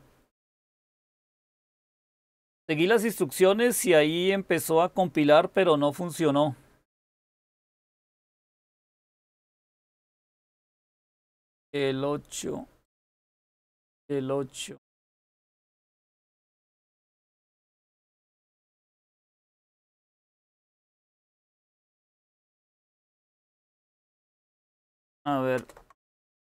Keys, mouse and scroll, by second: 25.5 super+Return.